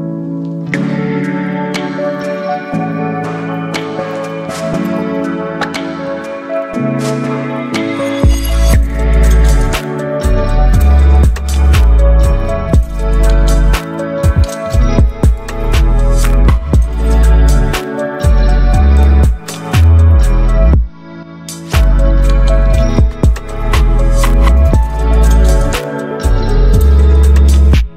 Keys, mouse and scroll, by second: 2.7 ctrl+j, 3.2 shift+click, 4.0 right click, 5.5-10.7 drag, 16.3 click, 19.2 click, 20.5 ctrl+v, 21.1 Return, 23.2 click.